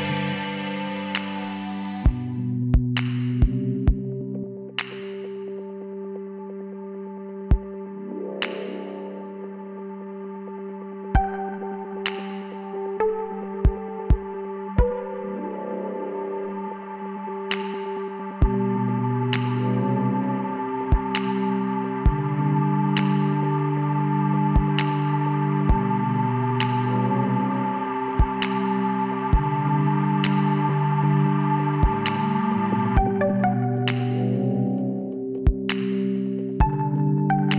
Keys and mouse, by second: 0.3 KP_1, 1.8 z, 4.3 g, 8.0-10.6 drag, 12.5-15.2 drag, 19.2-21.7 drag, 23.9-26.7 drag, 28.8-30.4 drag, 31.2-33.2 drag, 33.2 middle click, 34.0 z, 34.2 click, 34.5-36.3 middle drag, 36.4 KP_7.